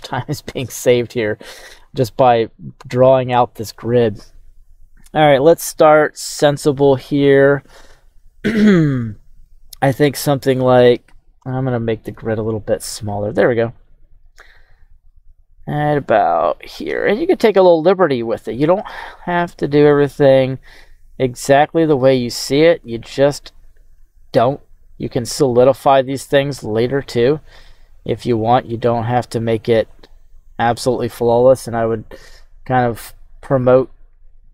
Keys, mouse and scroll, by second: 0.0 q.